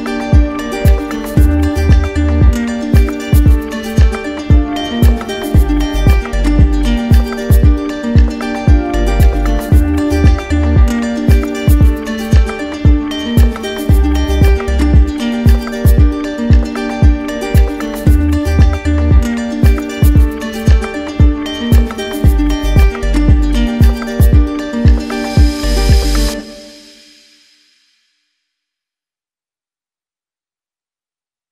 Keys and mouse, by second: 2.6-3.7 drag, 7.3 z, 8.9-10.1 drag, 12.5 click, 16.9 click, 20.3 click, 20.9 click, 22.3 z, 24.3 click, 25.2 click, 27.4 click, 28.9 z, 31.1 click.